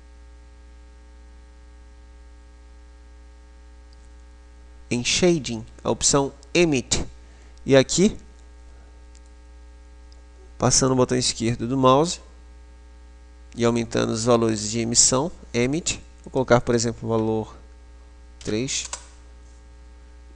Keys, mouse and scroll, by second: 9.6 click, 16.6 click.